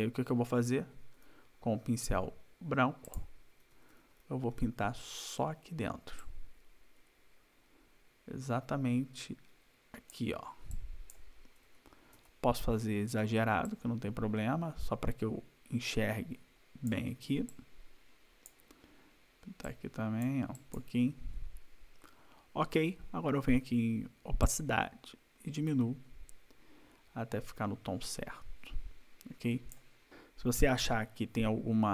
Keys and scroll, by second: 0.6 ], 3.6 ], 5.5 \, 11.7 ], 12.2 \, 17.1 \.